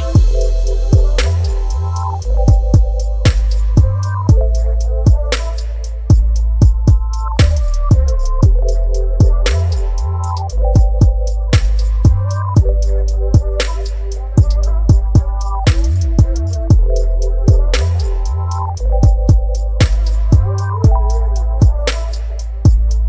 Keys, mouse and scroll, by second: 14.7 click.